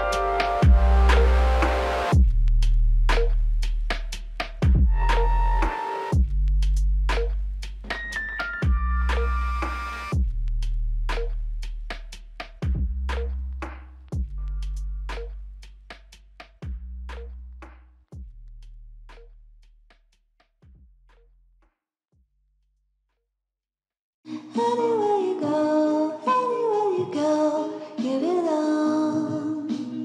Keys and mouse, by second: 1.0 shift+click, 1.8 shift+l, 2.3 alt+click, 5.1 f, 6.3 alt+click, 9.8 alt+click, 11.0 alt+click, 13.8 alt+click, 17.3 alt+click, 22.5 alt+click, 24.9 alt+click, 25.5-26.2 typing, 28.9 typing.